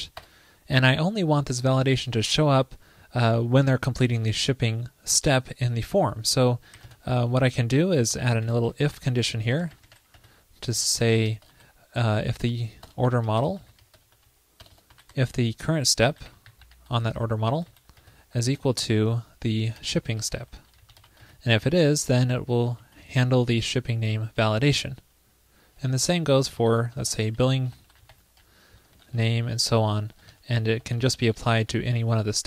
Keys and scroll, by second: 9.0 ctrl+l, 22.8 super+c, 22.8 super+s, 26.0 ctrl+shift+d, 26.5 alt+Left, 26.6 alt+shift+Right, 27.2 BackSpace, 28.9 alt+Left, 29.0 alt+Left, 29.2 alt+Left, 29.3 alt+Left, 30.0 alt+Left.